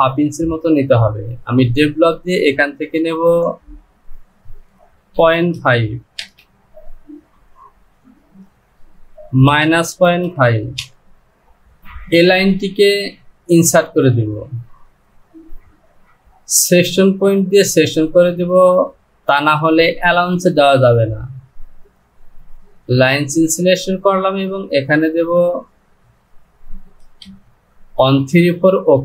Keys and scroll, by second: 4.6 Down, 9.6 KP_Subtract, 10.0 KP_Decimal, 10.9 Return, 26.3 Down.